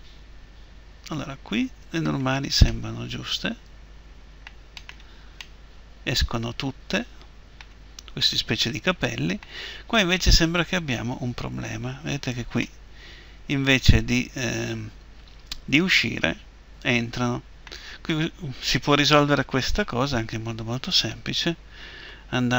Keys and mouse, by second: 2.4 middle click, 17.8 middle click.